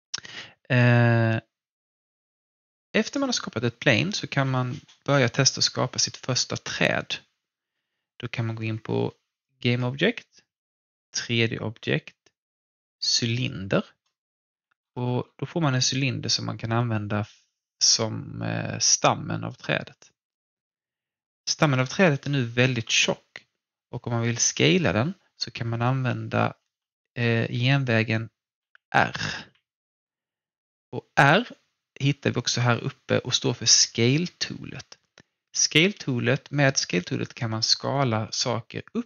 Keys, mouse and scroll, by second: 0.3-3.0 alt+drag, 9.4-13.3 drag, 14.3-17.1 scroll up 1, 19.6-21.0 scroll down 1, 21.1-25.4 alt+drag, 26.6-29.3 typing, 34.9-35.7 typing, 35.2-39.0 alt+drag.